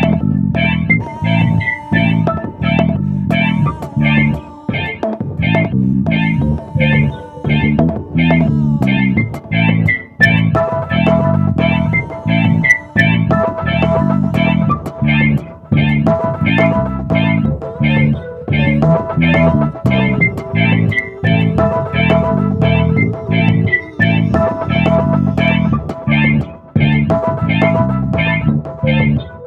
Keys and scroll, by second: 9.9 Return, 9.9 typing.